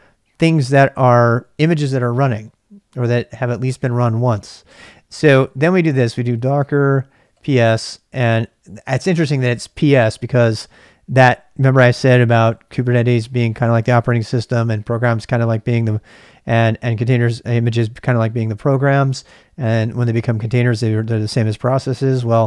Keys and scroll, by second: 0.6-1.7 typing, 4.6-5.3 typing, 7.0-7.8 typing, 9.3 typing.